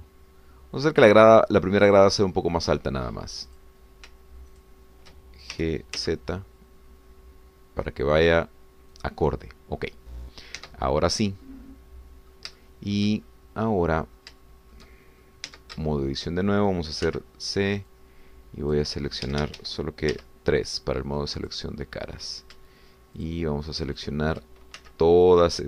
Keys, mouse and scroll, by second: 3.1 click, 4.6 click, 5.7 shift+click, 6.5 shift+g, 7.0 z, 9.9 click, 10.8 scroll down 1, 11.7 Tab, 12.2 scroll down 1, 12.5-13.5 drag, 13.6 shift+click, 14.3-14.6 shift+scroll up 2, 14.6 click, 15.4 shift+click, 16.5 shift+Tab, 16.9 shift+click, 18.1 c, 18.9-19.9 drag, 20.3 Escape, 21.1 3, 22.4 click, 22.7 middle click, 24.2 shift+click, 25.0 shift+click.